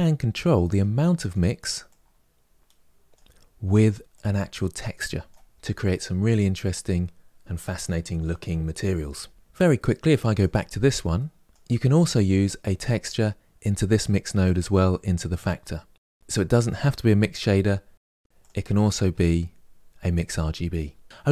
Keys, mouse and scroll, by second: 1.1 click, 1.8-5.1 drag, 9.4-10.2 scroll down 1, 10.2 click, 11.9 click, 16.8 click, 18.3 click.